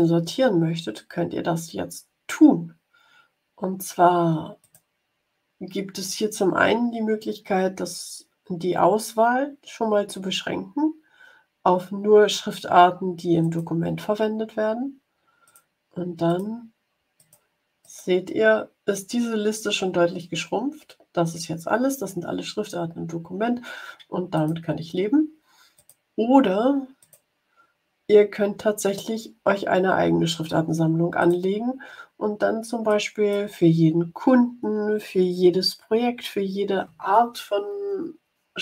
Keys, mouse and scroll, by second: 4.5 click, 13.3 click, 15.4 click, 16.2 click, 17.1 click, 17.8 click, 24.3 click, 25.7 click, 26.9 click, 31.1 click, 32.8 click.